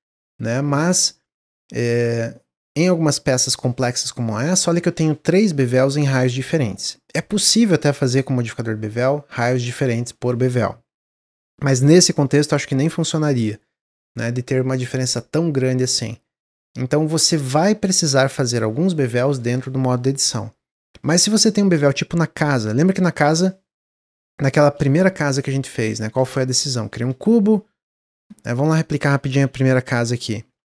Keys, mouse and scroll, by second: 24.5-26.0 middle drag, 26.0 shift+a, 27.6 s, 28.3-28.8 scroll down 1, 29.1 s, 30.5 Tab, 30.5 middle click.